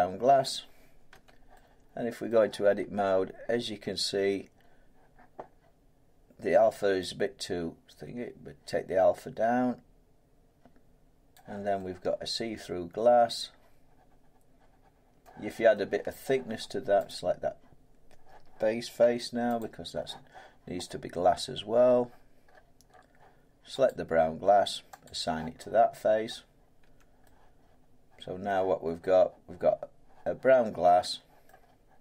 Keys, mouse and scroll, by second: 0.4 middle click, 1.1 Tab, 2.3 middle click, 3.0 middle click, 3.1-5.5 scroll, 5.5 scroll, 10.5 middle click, 11.3-13.5 drag, 15.2-15.7 scroll, 16.2 middle click, 17.1 click, 19.0 Tab, 19.6 click, 22.0 middle click, 22.1-23.8 scroll, 23.8 click, 25.0 click, 26.2-26.8 scroll, 26.8 Tab, 28.4 middle click, 28.8 scroll down 2, 29.8 scroll up 2, 31.4 middle click, 31.5-32.0 scroll down 6.